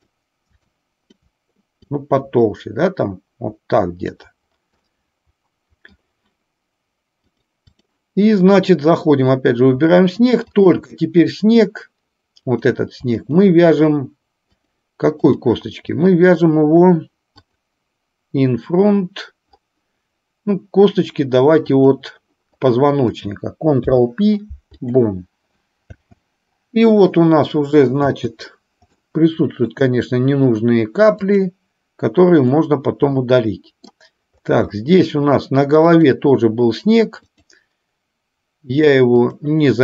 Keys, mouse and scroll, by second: 0.9 shift+click, 1.8-4.3 drag, 4.9-5.9 middle drag, 7.4 click, 10.6 shift+click, 12.6 click, 13.2 shift+click, 14.7-15.4 drag, 15.9-16.7 middle drag, 17.4 click, 21.8 click, 23.8 ctrl+p, 26.1 space, 29.1-29.8 middle drag, 31.3 click, 33.2-34.1 middle drag, 34.9 shift+middle drag, 37.4-39.6 drag.